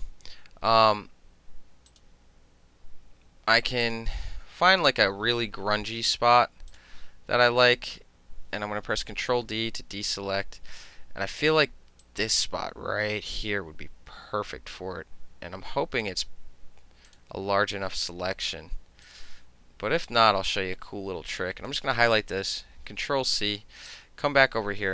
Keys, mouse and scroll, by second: 1.9 click, 3.9 click, 5.4-7.5 middle drag, 6.8 click, 9.2 ctrl+d, 12.1-16.1 drag, 17.1 click, 19.1-21.7 drag, 22.8 ctrl+c, 23.9 click.